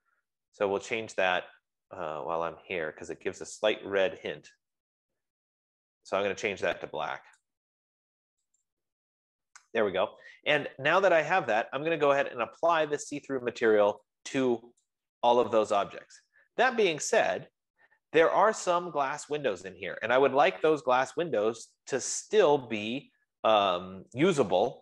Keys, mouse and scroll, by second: 7.6-14.6 drag, 15.7-20.5 drag.